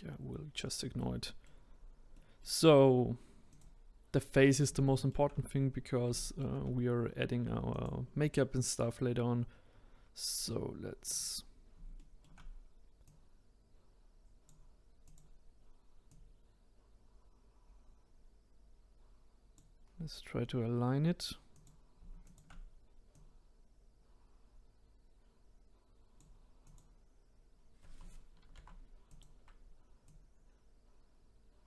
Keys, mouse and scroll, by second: 1.7-2.1 scroll down 1, 2.1-3.5 middle drag, 3.5 click, 4.8-5.7 shift+middle drag, 5.7-6.1 scroll down 3, 6.1-7.7 shift+middle drag, 7.7 click, 11.1 click, 12.0-13.0 shift+middle drag, 13.0 click, 15.0 click, 16.1 click, 19.8-20.9 scroll up 2, 21.5 click, 22.2 shift+click, 23.1 click, 26.6 click, 28.4 ctrl+z, 29.1 click, 30.0 click.